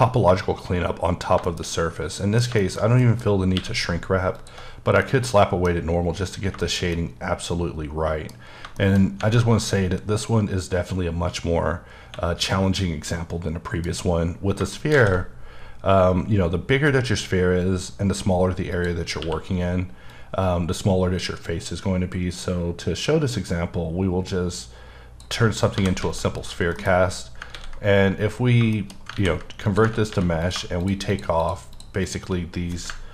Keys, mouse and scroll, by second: 0.1-1.0 scroll down 2, 1.1 scroll down 2, 1.5 shift+middle click, 3.6 q, 4.4 alt+click, 5.0 middle click, 6.3-6.6 scroll down 2, 6.6 shift+middle click, 8.3 scroll up 3, 8.8 shift+middle click, 9.0 shift+scroll up 1, 11.9 scroll down 1, 12.7-13.1 scroll down 2, 13.1 middle click, 14.4-14.7 scroll down 2, 14.7 shift+middle click, 14.9 shift+a, 15.5-16.1 scroll down 1, 18.7 click, 19.1 scroll down 1, 19.2 q, 20.1 click, 25.5 scroll down 1, 25.7 g, 26.0 z, 26.4 click, 26.7 KP_Decimal, 27.2 scroll up 3, 27.5 ctrl+a, 28.6 shift+a, 28.7 shift+middle click, 29.1 ctrl+a, 29.6 click, 30.1 3, 30.4 click, 31.1 shift+double click, 31.4 shift+click, 31.7 shift+click, 32.0 double click.